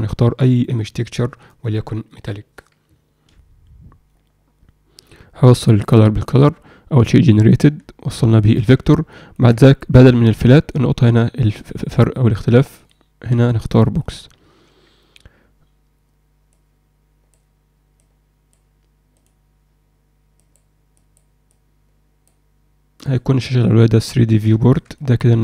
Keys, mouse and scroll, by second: 5.0-5.8 drag, 12.7-14.0 drag, 20.3 click, 20.9 click, 21.4 click, 23.1-23.7 drag, 24.6 ctrl+alt+middle click, 24.9 alt+middle drag.